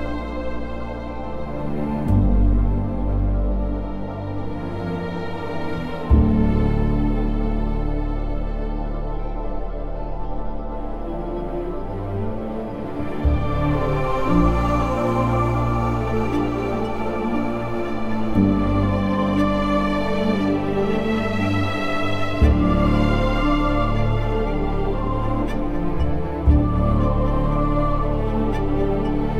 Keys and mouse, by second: 0.5 click, 2.3 alt+z, 3.7 alt+shift+click, 4.7 s, 6.6 1, 6.9 alt+z, 7.6 z, 8.8 g, 9.7 click, 11.6 g, 11.9 Escape, 12.4 alt+z, 14.0 g, 14.9 click, 15.7 click, 16.7 g, 17.2 click, 17.9 shift+middle click, 18.6 alt+z, 20.9 click, 21.8 g, 22.7 Escape, 23.0 alt+z, 23.6 alt+z, 24.3 g, 24.9 click, 25.4 click, 25.8 alt+z, 26.4 alt+z, 27.1 g, 28.0 click.